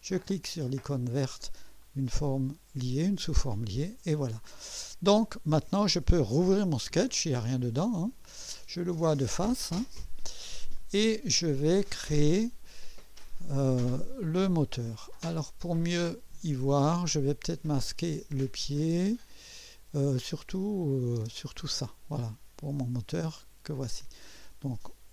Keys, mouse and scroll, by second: 1.8 click, 7.8 click, 9.4 click, 10.2 scroll up 1, 10.7 scroll down 2, 11.6-12.4 right drag, 16.1 click, 17.8 click, 18.3 space, 18.4 space, 20.4-21.2 typing, 20.8 click.